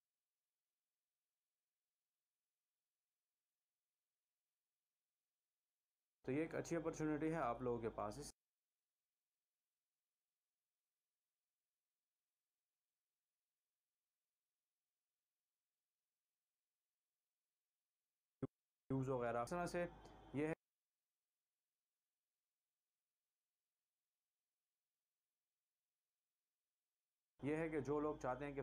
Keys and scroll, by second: 0.7 v, 3.3 shift+Delete, 6.6 space, 8.7 space, 12.7 c, 14.6 v, 16.6 shift+Delete, 19.2 space, 20.9 space, 25.2 v, 27.3 shift+Delete, 27.7 space.